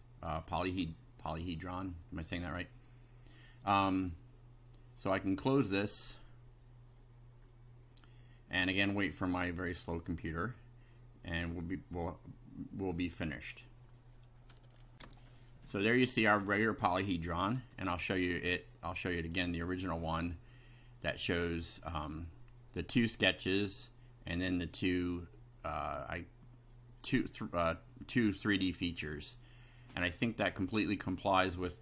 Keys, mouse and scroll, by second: 2.0 middle click, 5.0-5.6 drag, 5.8 click, 14.9 ctrl+r, 16.4-17.0 middle drag, 17.6 click, 18.8-19.5 drag, 21.9 click.